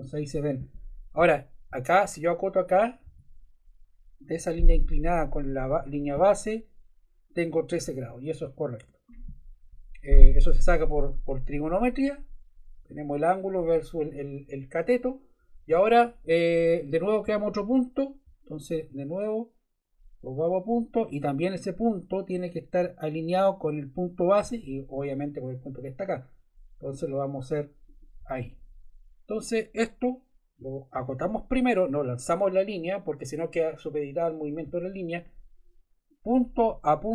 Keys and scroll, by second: 3.0 d, 8.8 Return, 10.7 Escape, 29.7 Escape, 30.9 d.